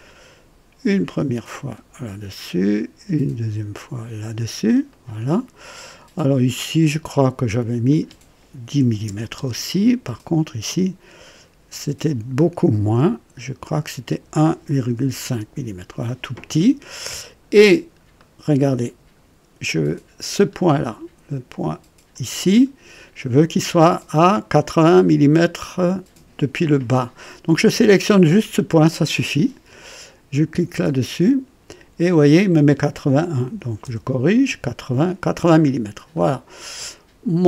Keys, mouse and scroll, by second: 1.4 click, 3.7 click, 4.9 right click, 6.6 click, 7.8 click, 8.8 KP_1, 9.0 KP_0, 9.3 Return, 11.2 click, 11.7 typing, 13.3-15.2 typing, 13.6 click, 17.6 scroll down 1, 18.1 right click, 18.4-19.4 typing, 18.9 scroll down 2, 20.3 scroll up 1, 22.1 click, 22.7-23.2 scroll down 1, 31.0 click, 33.4 KP_8, 33.6 KP_8, 33.8 KP_0, 34.3 Return, 34.5 KP_Enter, 35.7 scroll up 1, 36.1 right click.